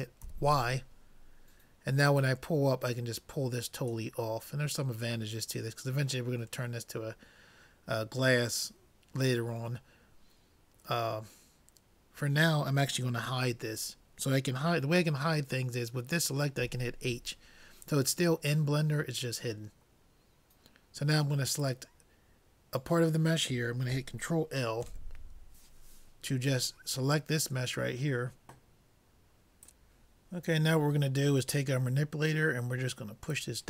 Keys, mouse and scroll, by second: 0.3 y, 2.2-3.9 drag, 4.6-7.3 middle drag, 16.6 h, 21.6-23.4 drag, 24.9 ctrl+l, 32.1 middle click, 33.3-33.6 drag.